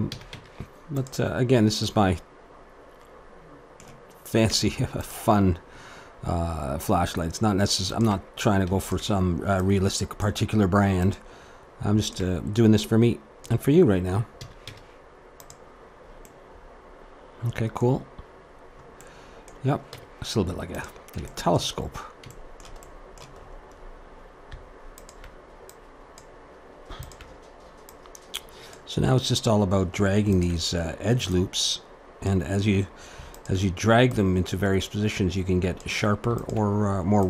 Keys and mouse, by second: 0.1 a, 0.3 Tab, 1.3 click, 4.5 Tab, 5.5-8.0 middle drag, 8.0-14.6 drag, 14.4 a, 14.6 Tab, 15.8-20.9 middle drag, 19.9 Tab, 21.3-25.0 middle drag, 25.0-29.7 drag, 30.3-33.2 drag, 35.6 click, 36.4-37.2 drag.